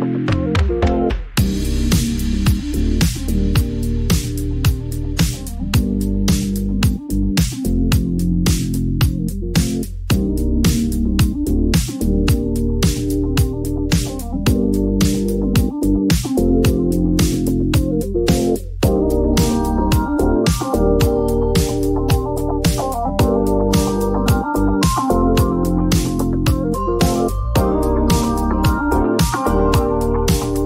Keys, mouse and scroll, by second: 0.3 click, 0.4 click, 2.6 click, 3.9 click, 9.4 click, 10.8 click, 13.7 click, 14.8-16.9 typing, 16.8 Return, 18.5 click, 18.5 typing, 19.4 click, 22.0 click, 24.1 click, 27.0 click, 28.5 click.